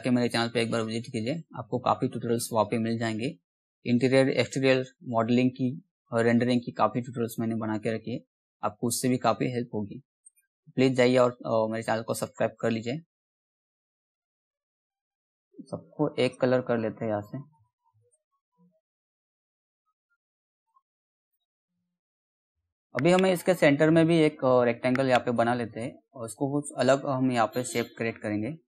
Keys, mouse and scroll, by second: 1.1 click, 6.9 click, 9.2-12.7 drag, 24.8-28.6 drag.